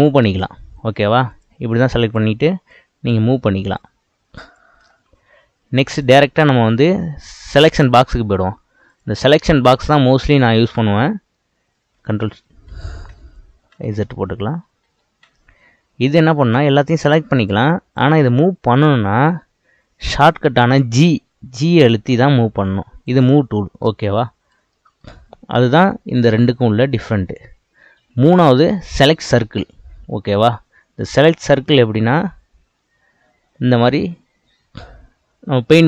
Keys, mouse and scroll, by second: 1.3 click, 2.0 click, 2.7 click, 3.7 click, 4.9-5.4 scroll down 3, 6.1-9.0 drag, 9.4-12.0 middle drag, 12.0 ctrl+z, 12.3 ctrl+z, 12.7 ctrl+z, 13.1 ctrl+z, 14.4 ctrl+z, 14.9 ctrl+z, 16.4 click, 16.9 click, 17.4 click, 18.0 click, 18.6-21.0 scroll up 4, 21.0 g, 23.7-24.7 scroll down 2, 24.7-26.4 shift+middle drag, 26.4-29.4 drag, 30.3-30.8 scroll up 4, 30.8-32.1 scroll down 4, 32.1-35.1 drag.